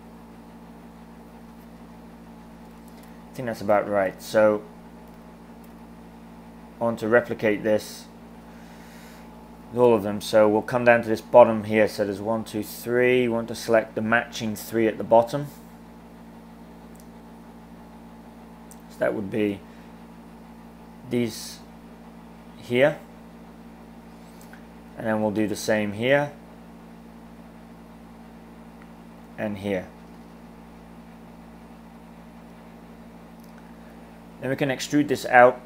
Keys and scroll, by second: 2.8 super+z, 9.0 super+z, 34.6 e.